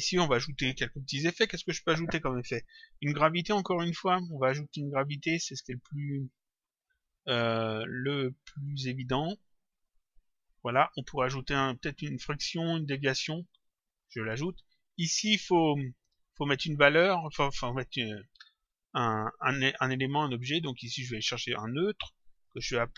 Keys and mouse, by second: 8.5 click, 10.5 click, 13.5 click, 19.5 click, 22.3 click.